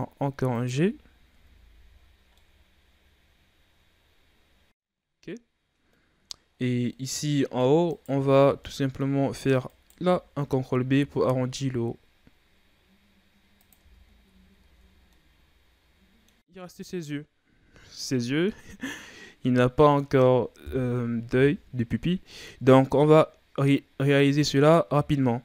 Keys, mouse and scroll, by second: 0.7 z, 0.9 scroll up 1, 1.0 scroll down 5, 1.3 Tab, 1.6 a, 1.9-2.3 scroll down 4, 2.3-5.2 middle drag, 5.2-5.8 scroll up 4, 5.8-6.4 middle drag, 6.4-6.8 scroll up 4, 6.8-7.8 middle drag, 7.8 right click, 8.2 Tab, 8.6-9.6 middle drag, 9.6 alt+right click, 10.9 ctrl+b, 13.7 Tab, 14.0-14.5 scroll down 2, 14.5 a, 14.8 scroll down 3, 15.1-16.6 middle drag, 16.1 scroll down 1, 16.6-18.4 scroll down 4, 18.4-18.9 scroll down 1, 18.9-19.2 scroll up 3, 19.2 scroll down 2, 19.5-20.5 middle drag, 20.5 KP_1.